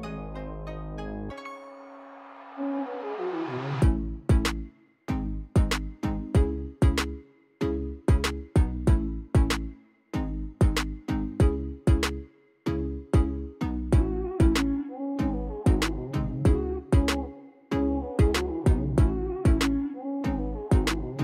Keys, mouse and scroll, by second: 0.3 click, 1.0 KP_0, 1.3 KP_8, 1.4 Return, 3.4 click, 4.4 click, 7.2 click, 9.6 click, 12.3 middle click, 12.8 scroll down 1, 14.1 F8, 14.1 middle click, 14.3 middle click, 14.5-14.9 middle drag, 15.0 middle drag, 15.4 middle click, 15.6 middle click, 15.9 middle drag, 17.8 click, 18.8 click, 20.2 click, 21.1 click.